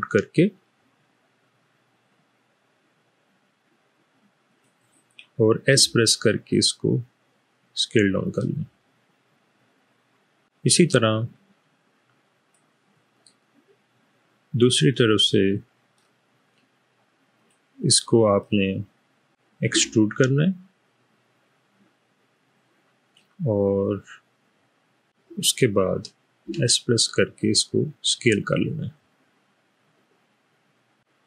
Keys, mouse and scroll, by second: 4.5 click, 5.7 s, 13.7-15.9 middle drag, 17.3 click, 18.5 middle click, 19.8 e, 26.4 s.